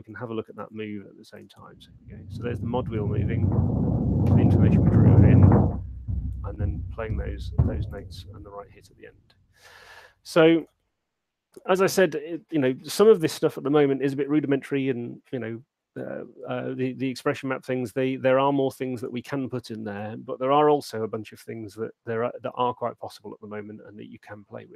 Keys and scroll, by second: 0.6 alt+shift+space, 8.6 space.